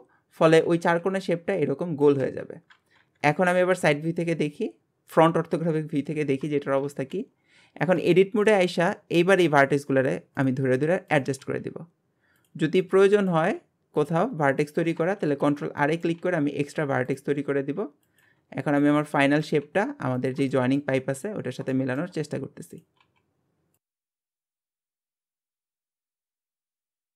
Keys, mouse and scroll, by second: 3.0 KP_1, 4.4-6.2 scroll down 2, 6.2 Tab, 6.9 alt+z, 8.1 scroll up 1, 8.2 shift+middle click, 8.7-9.3 scroll up 1, 9.3 click, 9.6 g, 11.1 click, 11.5 g, 13.1 click, 13.4 g, 14.6 click, 15.2 ctrl+r, 16.0 click, 16.2 g, 18.1 click, 18.3 g, 19.4 click, 19.6 g, 20.5 shift+middle click, 21.0-21.7 scroll up 1, 21.7 shift+middle click, 22.2-22.7 scroll up 1, 22.7 click, 24.4 scroll down 5, 24.5 shift+middle click, 24.7 scroll up 1, 24.8 click, 24.9 g, 25.2 click, 25.3 g, 25.6 click, 26.1 click.